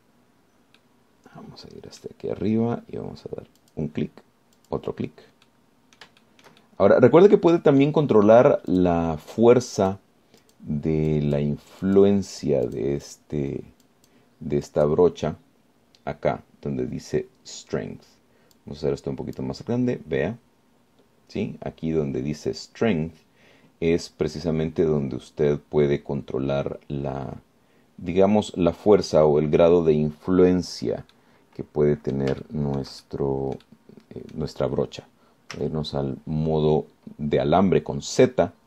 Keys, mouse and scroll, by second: 2.0-3.4 middle drag, 4.8 click, 5.8 click, 6.7 middle click, 7.5-9.3 shift+middle drag, 9.9 click, 11.0 click, 11.7 click, 12.3 click, 13.1 click, 13.9 click, 14.3 click, 15.1 click, 15.9 click, 19.8-20.8 drag, 32.3-33.5 middle drag, 33.7 shift+middle click, 34.6-35.7 middle drag, 36.7 z.